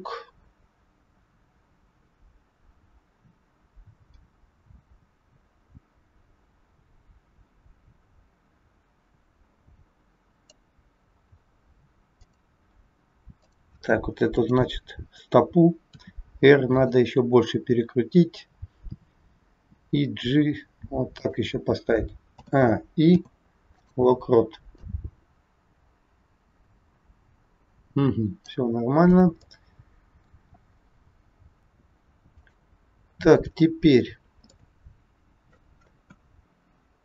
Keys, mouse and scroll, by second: 12.1 click, 13.4 click, 15.9 r, 19.6 g, 22.4 a, 23.0 i, 24.8 click, 28.9 scroll down 1, 29.5 middle click, 29.5 scroll down 1, 31.6 click, 32.3 click, 34.0-34.5 scroll down 2, 34.5 middle click, 36.0 KP_1.